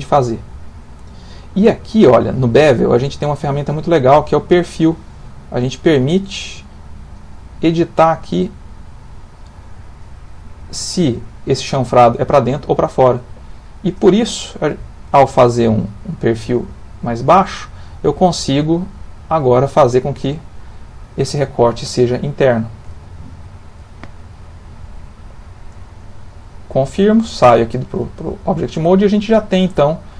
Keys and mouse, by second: 3.6 click, 10.2 middle click, 11.8 middle click, 15.6 click, 18.2 click, 22.0 ctrl+middle click, 26.8 middle click, 27.4 Tab, 27.8 middle click, 27.9 middle click, 28.1 middle click.